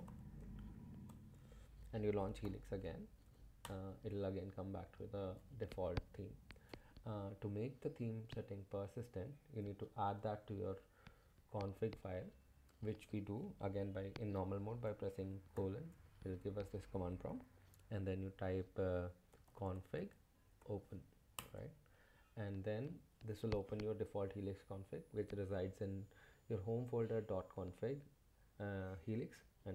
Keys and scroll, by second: 0.0-1.1 typing, 2.2-3.2 typing, 3.6 Return, 15.5 shift+;, 19.1-20.1 typing, 20.6 Tab, 21.4 Return.